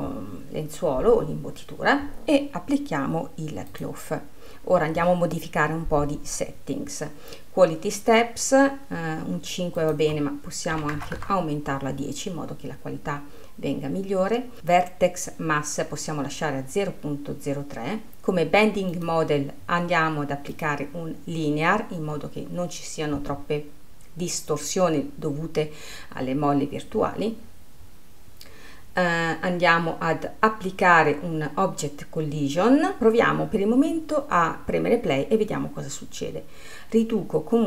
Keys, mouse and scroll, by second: 0.0-3.1 scroll up 1, 4.2-7.2 drag, 10.3-13.4 drag, 16.9-19.5 scroll down 1, 19.5-22.5 drag, 27.6-29.8 scroll down 10, 29.8-34.1 scroll down 10.